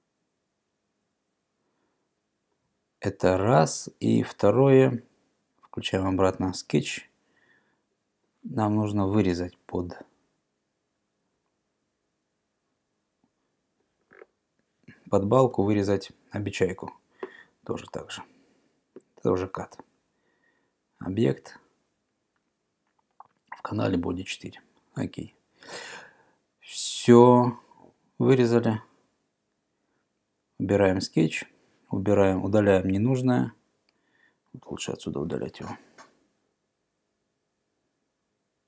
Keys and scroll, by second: 15.6 e.